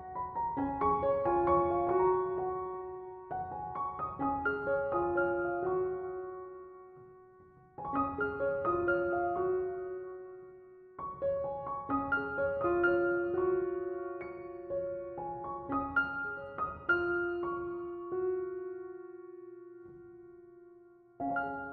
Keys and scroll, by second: 3.0 space, 14.6 space.